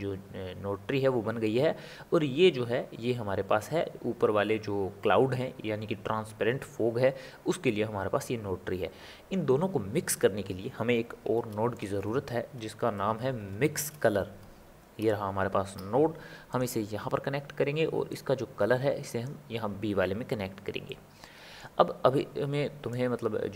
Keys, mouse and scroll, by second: 11.3 shift+a, 18.3 click, 20.8-23.1 middle drag, 23.1 click.